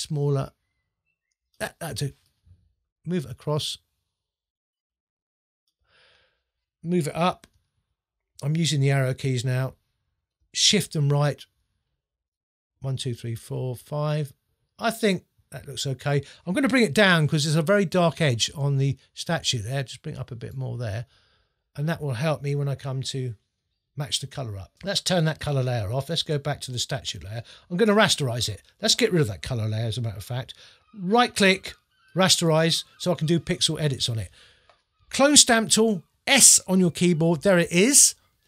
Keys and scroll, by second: 7.3 Up, 10.7 shift+Left, 12.7 Right, 17.1 shift+Down, 19.6 shift+Up, 22.4 Up, 29.7 BackSpace, 36.8 s.